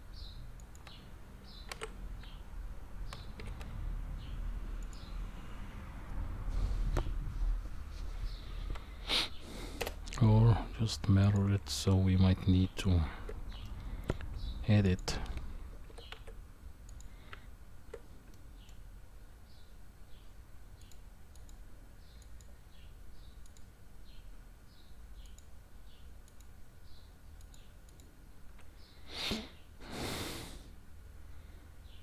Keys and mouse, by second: 1.7 shift+d, 9.8 Delete, 11.2 click, 12.6 Tab, 13.6 middle click, 14.9 click, 15.9 g, 17.3 Tab, 18.3-18.7 middle drag, 21.3-22.4 drag, 23.4 click, 27.4 click, 27.9 click.